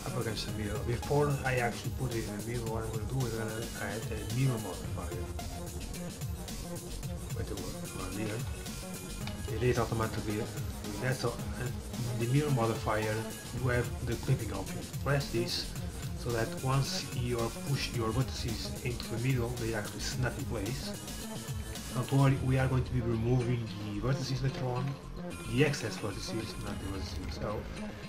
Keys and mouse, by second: 3.4-5.9 drag, 5.9-7.1 middle drag, 8.8-12.3 middle drag, 9.2 z, 12.3-14.2 drag, 15.0-18.1 drag, 24.5 KP_7, 25.9 z, 27.5 a.